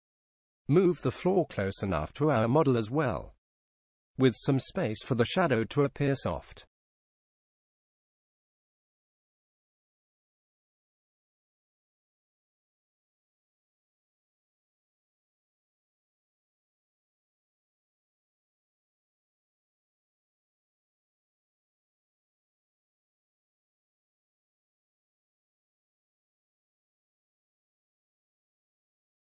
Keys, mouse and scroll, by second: 4.2-5.4 middle drag, 8.1-11.2 middle drag, 12.8-14.7 drag, 16.0 g, 20.1 middle click, 21.0 middle click, 22.0 middle click, 26.2 g.